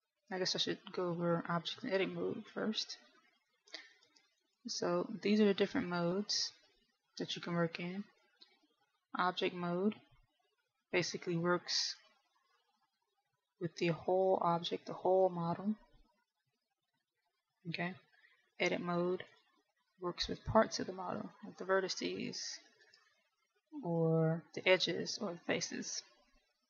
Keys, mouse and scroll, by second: 1.8 middle click, 5.9 click, 13.8 click, 20.1 click, 23.0 g.